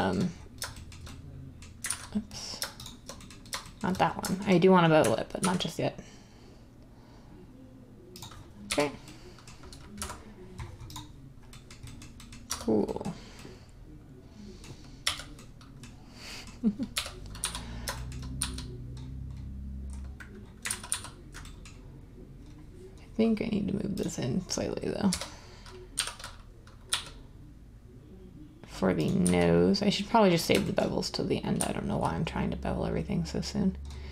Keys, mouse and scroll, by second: 1.9 ctrl+z, 5.3 ctrl+b, 8.6 1, 9.9 `, 12.4 Tab, 15.3 1, 16.9-17.3 typing, 20.6 ctrl+z, 20.9 ctrl+z, 25.1-26.9 typing, 29.2 z, 31.5 z.